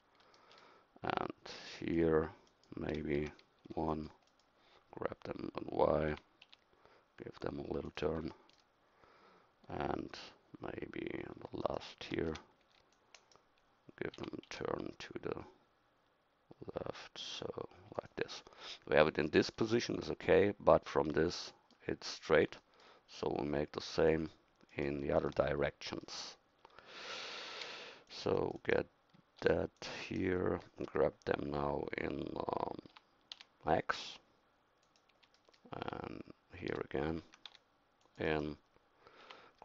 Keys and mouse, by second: 3.2 a, 3.6 c, 6.1 g, 12.3 a, 12.6 c, 14.2 g, 26.2 middle click, 27.1 a, 27.6 c, 29.4 c, 32.9 g, 37.2 a, 37.5 c, 39.3 g.